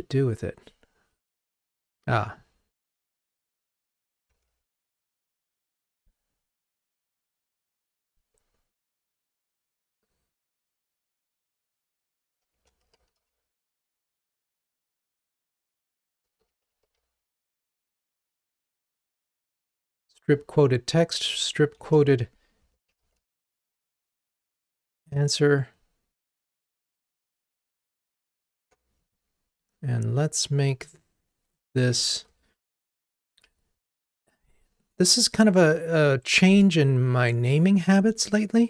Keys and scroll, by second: 4.8 alt+super+m, 29.0 Down, 32.0 super+a, 33.9 super+z.